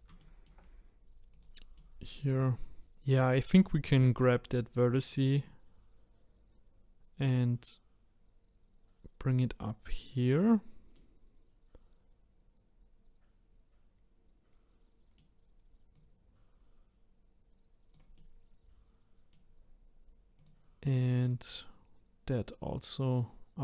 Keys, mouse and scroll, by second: 0.2-1.3 shift+middle drag, 1.3 click, 1.7-2.8 middle drag, 2.8 click, 4.0 shift+middle click, 4.9-7.9 drag, 10.9-14.0 middle drag, 15.9 click, 18.1-20.3 middle drag, 20.3 click, 21.2 click, 21.6-23.4 drag.